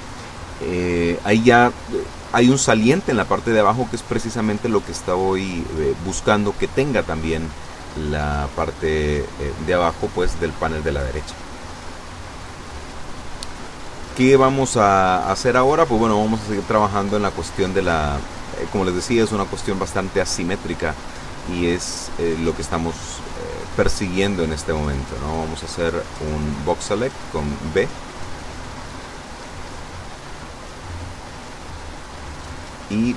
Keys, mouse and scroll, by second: 5.1-5.5 scroll up 2, 6.3 n, 22.9 a, 26.1 b, 26.5 click, 31.9 e.